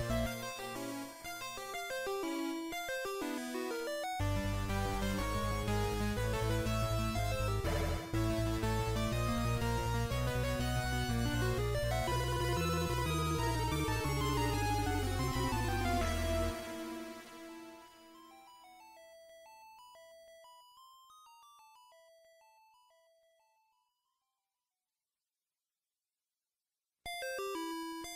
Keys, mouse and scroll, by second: 1.2-1.8 scroll up 2, 2.6-3.2 scroll up 1, 3.2 click, 5.7 KP_1, 7.7-8.4 scroll down 3, 8.6 scroll down 1, 9.2 shift+middle click, 9.2 scroll down 1, 12.3-13.2 scroll up 1, 13.2 e, 14.1 right click, 15.3 s, 19.9 click, 21.4 middle click, 25.6 e.